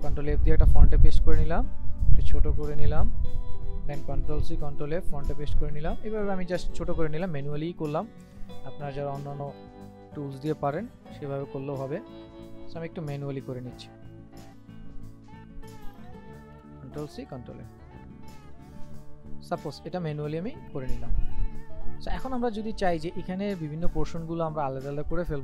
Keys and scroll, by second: 4.2 ctrl+c, 4.5 ctrl+f, 8.4 ctrl+c, 8.6 ctrl+f, 13.1 ctrl+c, 13.3 ctrl+f, 16.4 ctrl+c, 16.7 ctrl+f.